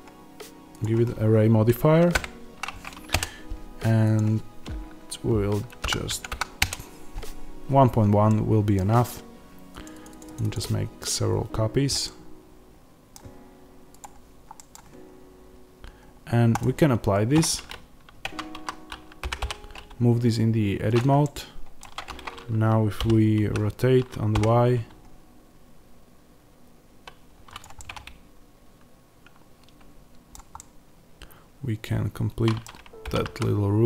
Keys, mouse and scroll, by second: 3.1 KP_Enter, 6.6 KP_Enter, 8.2-9.7 middle drag, 9.7-11.9 drag, 11.9-13.9 middle drag, 13.9 click, 14.5-16.5 middle drag, 16.5-21.1 drag, 18.1 Tab, 18.4 a, 19.1 g, 21.1-27.5 middle drag, 21.7 Tab, 22.9 r, 27.5 click, 27.7-33.8 middle drag, 33.0 g.